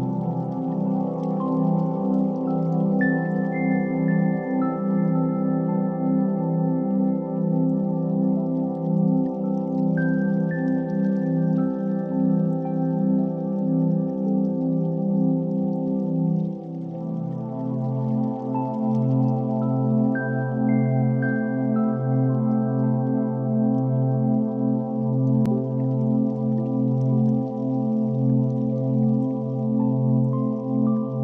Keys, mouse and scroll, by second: 1.7 click, 3.4 click, 4.1 0, 5.7 scroll down 3, 6.6 middle click, 7.5 KP_1, 8.5 g, 9.8 KP_3, 10.2 g, 11.5-13.2 middle drag, 13.2 click, 15.2 scroll up 4, 15.8 r, 17.4 click, 20.5 scroll up 1, 21.0-23.8 middle drag, 23.8 click, 26.3-27.6 drag, 27.6 shift+middle click, 28.2-28.9 scroll up 4, 28.9 shift+a.